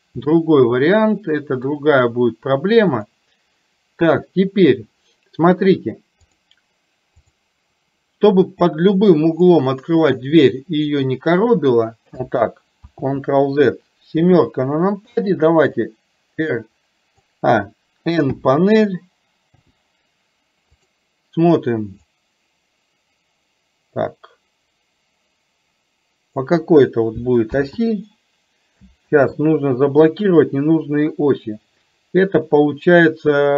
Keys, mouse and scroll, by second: 0.4-1.7 middle drag, 6.4 click, 7.2 click, 9.5-11.0 drag, 14.2 KP_7, 15.7 click, 16.0-17.4 drag, 20.9 click, 22.2-26.5 drag, 29.1 ctrl+z.